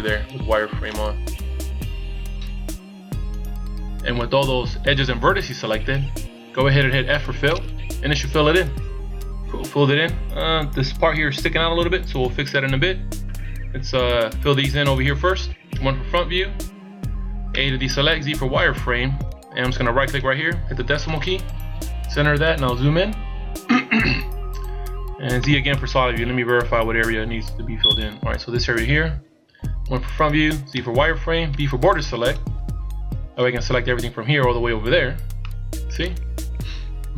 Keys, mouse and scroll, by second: 0.3 z, 0.8 middle click, 7.5 f, 10.3 scroll up 1, 12.0-12.4 scroll down 2, 13.5 scroll down 2, 14.4-15.7 scroll down 1, 15.7 KP_1, 17.5 a, 18.2 z, 20.1 right click, 21.0 KP_Decimal, 22.6-23.5 scroll up 8, 25.4 z, 25.7 middle click, 29.5 KP_1, 30.7 z, 31.5 b, 35.4 middle click.